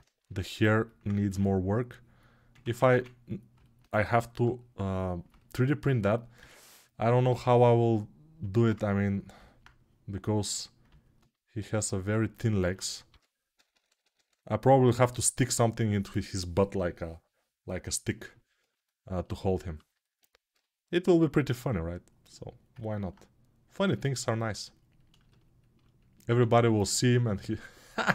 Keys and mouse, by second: 1.1 ctrl+r, 2.5 ctrl+z, 2.6 1, 7.7-11.6 right drag, 11.6 ctrl+alt+click, 11.8 ctrl+right click, 11.8 ctrl+alt+click, 11.9 alt+right click, 12.5-22.5 alt+drag, 12.8 g, 13.5-16.8 ], 26.1 1.